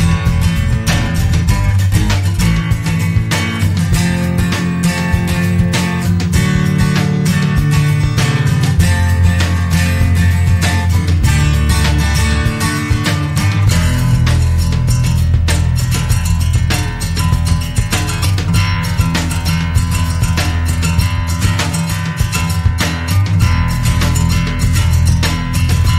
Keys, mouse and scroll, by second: 0.2 click, 1.0 click, 3.2 click, 5.1 scroll down 1, 5.8-9.5 scroll up 1, 11.1 click, 18.5 click, 20.6 click, 21.5 click, 22.6 click, 24.8 click.